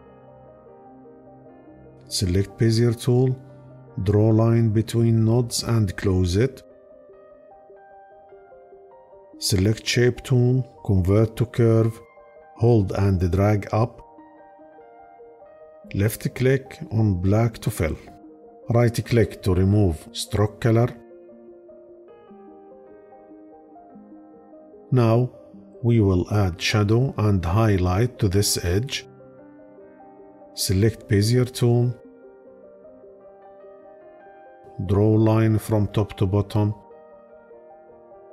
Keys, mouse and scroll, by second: 15.9-18.3 drag, 18.7-21.2 right drag.